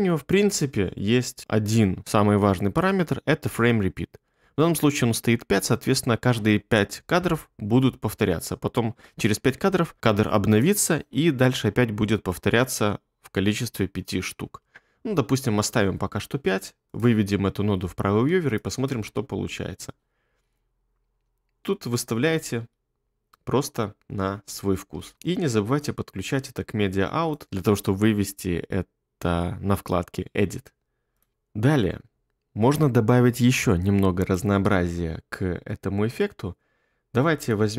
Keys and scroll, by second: 17.9 2, 18.9 space, 24.9 space.